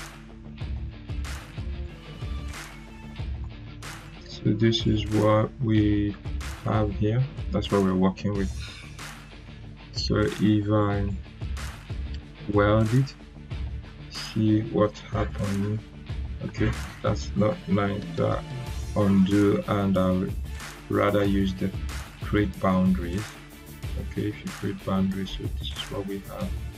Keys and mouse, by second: 6.0 right click, 12.3 click, 15.2 click, 15.2-16.3 drag, 18.0 ctrl+z, 22.6-25.2 drag.